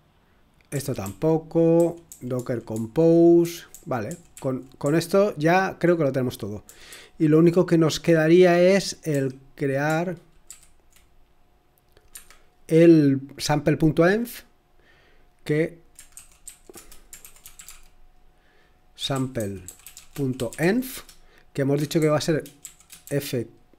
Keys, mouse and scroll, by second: 0.7-3.2 typing, 4.3-5.5 typing, 6.6 typing, 9.1 typing, 10.4 typing, 11.9-12.6 typing, 16.1-23.1 typing.